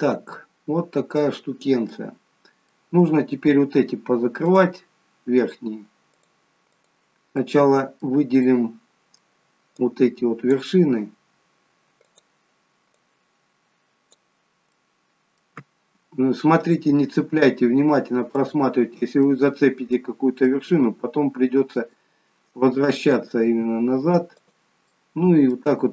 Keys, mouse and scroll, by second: 1.5-2.0 scroll down 2, 2.0 middle click, 4.4 click, 6.2 click, 7.4 middle click, 8.4 middle click, 9.7 click, 12.0 click, 14.7 middle click, 14.7-15.2 scroll up 1, 16.1-17.3 scroll up 2, 18.3 shift+click, 19.3 middle click, 20.5 middle click, 23.4 g, 24.8 middle click.